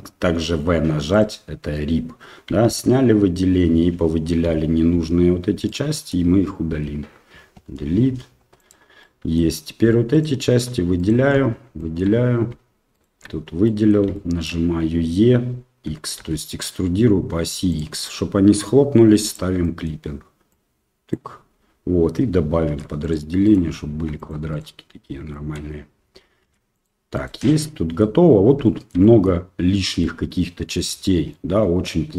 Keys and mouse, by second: 2.6 alt+a, 4.4 l, 4.9 l, 5.7 middle click, 6.7 l, 7.6 Delete, 9.0 middle click, 10.1 alt+right click, 11.0 alt+shift+right click, 11.7 shift+middle click, 12.9 alt+shift+right click, 13.6 middle click, 14.1 shift+middle click, 15.9 e, 19.7 middle click, 20.5 click, 22.6 ctrl+r, 23.9 ctrl+r, 25.4 middle click, 26.4 ctrl+r, 27.5 middle click, 28.7 middle click, 29.0 middle click, 30.0 middle click, 31.4-32.1 middle drag.